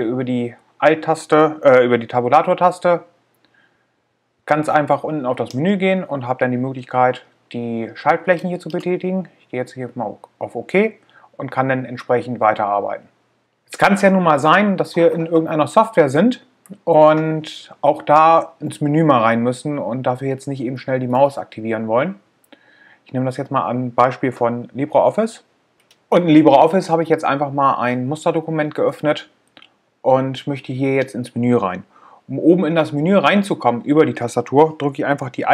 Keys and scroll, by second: 2.8 Tab, 8.9 Return.